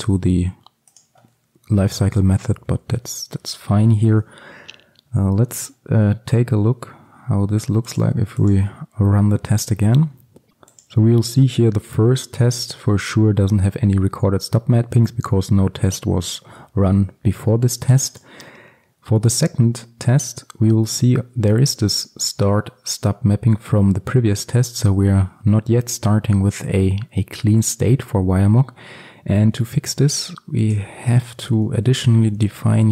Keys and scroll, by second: 2.7 ctrl+v, 3.2 ctrl+x, 4.0 ctrl+alt+super+l.